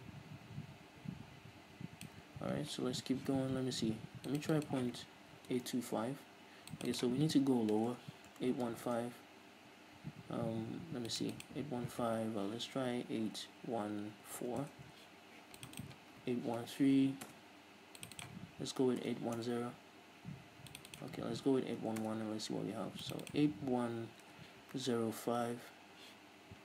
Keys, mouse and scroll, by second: 6.0 Return, 8.2 BackSpace, 9.1 Return, 14.9 Return, 17.5 Return, 19.7 Return, 22.3 Return, 25.8 Return.